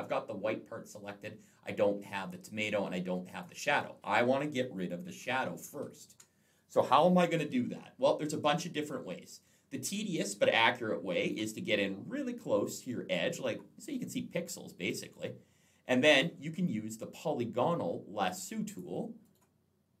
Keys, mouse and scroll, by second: 3.0 click, 5.0 ctrl+z, 7.4-8.5 alt+scroll down 1, 8.5-8.8 alt+scroll up 1, 9.9 space, 10.0 click, 11.9 alt+scroll up 1, 14.3-15.6 alt+scroll down 1, 18.5 click, 19.0 right click.